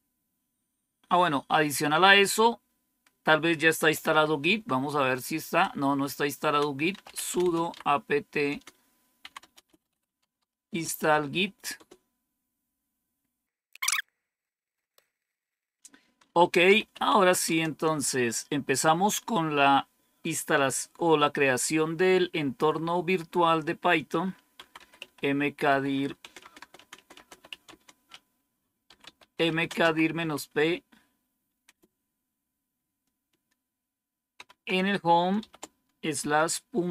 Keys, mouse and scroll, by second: 3.4-11.7 typing, 13.7 Return, 16.3-17.7 typing, 24.2-31.5 typing, 34.3 typing, 35.3-36.9 typing.